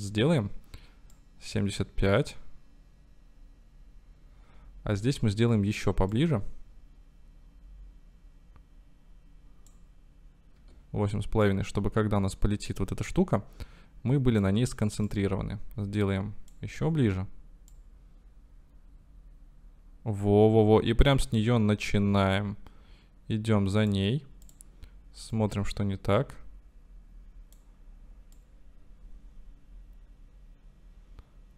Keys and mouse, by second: 2.8-5.4 drag, 6.1-9.8 drag, 10.7 i, 11.4-14.6 drag, 15.1-16.6 drag, 16.8 i, 17.7 click, 24.1 middle click, 24.7 middle click, 25.4-27.7 drag, 28.4 click, 29.0-31.5 drag.